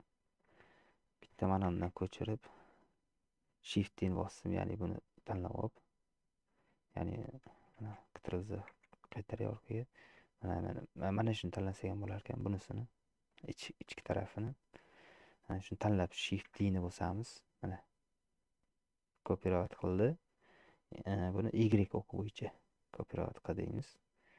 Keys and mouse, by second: 1.9 shift+d, 8.0 ctrl+z, 9.6 middle click, 10.2 click, 11.0 click, 11.5 middle click, 12.7-13.8 middle drag, 14.0 middle click, 15.0 shift+click, 15.2 middle click, 16.7 shift+d.